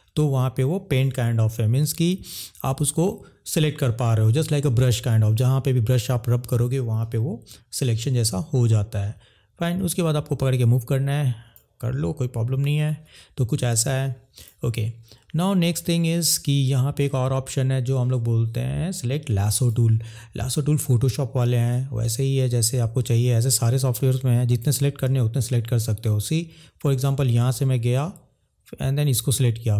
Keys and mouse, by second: 9.8 click, 10.9 click, 12.9 ctrl+z, 14.3 click, 16.5-19.8 drag.